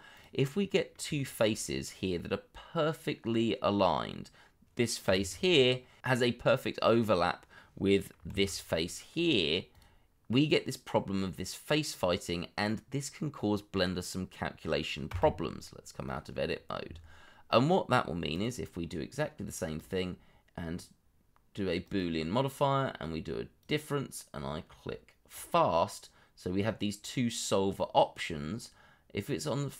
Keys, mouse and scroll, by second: 0.4 middle click, 1.1 shift+middle click, 1.4 scroll up 1, 2.1 middle click, 6.0 3, 6.0 middle click, 8.3 alt+q, 9.1 middle click, 15.1 Tab, 15.6-16.5 scroll down 1, 16.5 middle click.